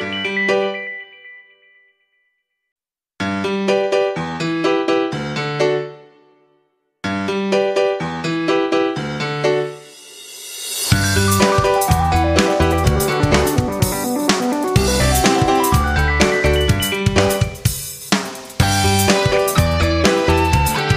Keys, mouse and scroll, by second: 1.3 F9, 1.7-11.0 drag, 13.5-18.1 drag, 19.0-20.9 drag.